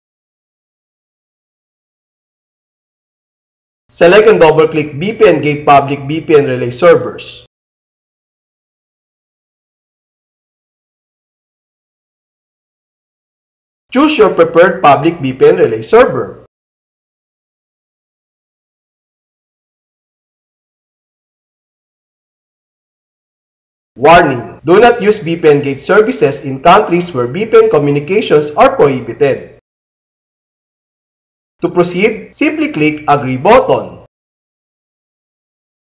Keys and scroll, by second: 7.9 space, 9.9 Down, 11.9 Return, 17.9 space, 19.1 Down, 20.4 Down, 21.7 Down, 22.9 alt+c, 35.0 alt+a.